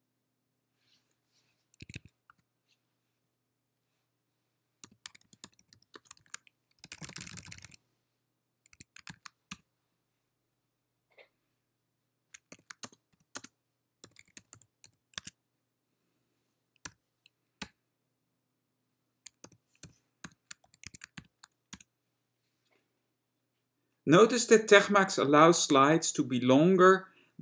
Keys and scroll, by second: 1.9 BackSpace, 2.0 BackSpace, 2.4 Escape, 5.0-6.4 typing, 7.8-10.1 typing, 12.7-15.1 typing, 15.2 Tab, 17.0 6, 17.7 Return, 19.6-22.2 typing.